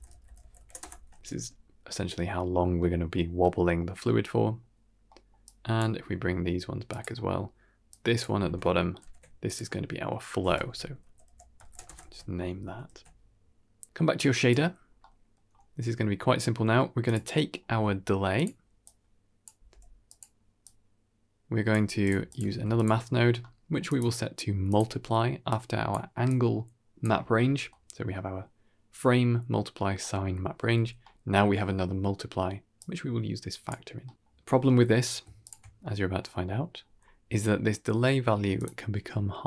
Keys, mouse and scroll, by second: 1.0 ctrl+s, 2.4 scroll down 2, 2.7 middle click, 3.3 middle click, 3.9 middle click, 5.0 middle click, 5.3-5.7 drag, 5.8 g, 7.0 middle click, 7.8-8.1 drag, 8.9 ctrl+j, 9.3 click, 10.3 F2, 11.9 ctrl+s, 12.8 ctrl+s, 13.2-14.4 drag, 14.7-15.0 scroll down 2, 14.9-15.2 middle drag, 15.9 scroll up 2, 16.3 middle click, 16.9 drag, 17.2 middle click, 17.5 g, 18.7 click, 19.4 g, 20.5-21.6 drag, 21.9 click, 22.2 click, 22.4 shift+d, 22.9-23.7 scroll up 3, 23.3 middle click, 23.7-24.7 drag, 25.4-25.8 drag, 26.2-26.9 drag, 27.3-27.8 scroll down 3, 27.6 middle click, 29.9 middle click, 30.6-31.1 scroll up 4, 30.9 middle click, 32.6-33.6 drag, 33.9 middle click, 34.8 ctrl+shift+click, 35.3 ctrl+shift+click, 36.5-36.8 scroll down 3, 36.7-37.1 middle drag, 37.5 middle drag, 38.4 ctrl+shift+click, 38.7 middle click, 39.3 middle click.